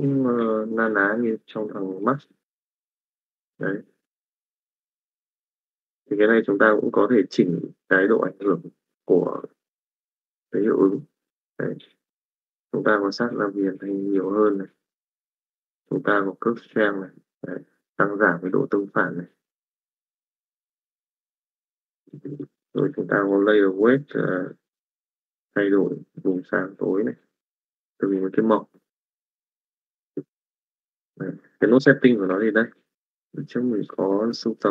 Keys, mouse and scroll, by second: 2.2 middle click, 3.2 middle click, 5.8-14.3 drag, 15.0-21.2 drag, 21.5 click, 23.1-27.9 drag, 29.5 click, 31.2 click, 33.7 middle click, 34.6 click.